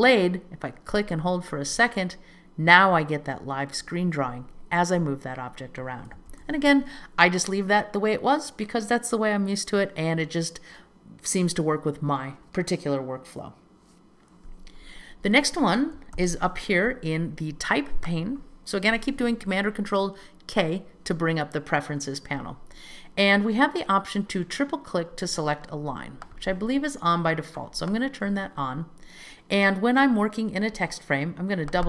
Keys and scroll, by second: 6.4 super+z, 16.3 super+k.